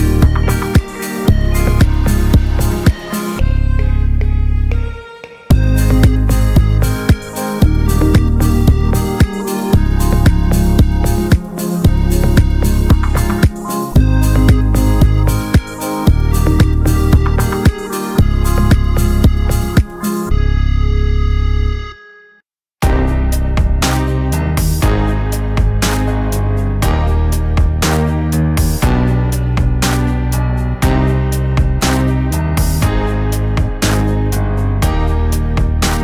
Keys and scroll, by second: 31.0 v.